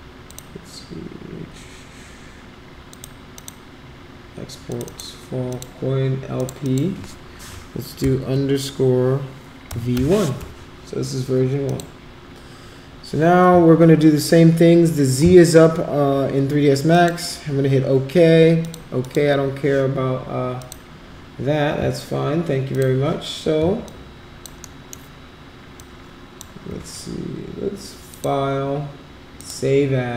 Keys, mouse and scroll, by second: 0.2 click, 2.9 click, 3.3 click, 4.6 click, 4.8 click, 5.4 click, 6.3 click, 6.6 click, 9.6 v, 11.6 click, 16.9 click, 18.6 click, 19.0 click, 20.5 click, 22.7 click, 23.8 alt+click, 24.7 alt+middle click, 25.7 alt+click, 28.1 click, 29.3 click.